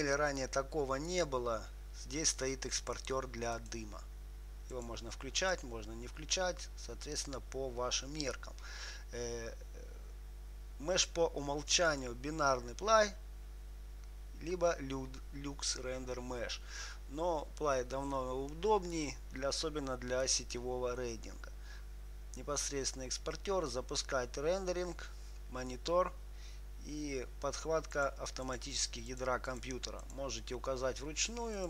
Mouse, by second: 12.1-15.4 drag, 28.2-31.6 drag.